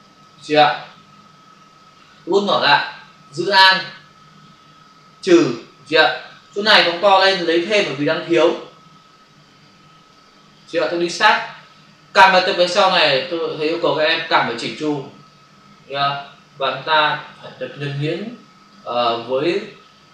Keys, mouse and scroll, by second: 2.2 [, 3.6 alt+click, 6.6 ctrl+click, 8.0 click, 10.5 click, 15.2 click, 16.8 alt+click, 18.7 click.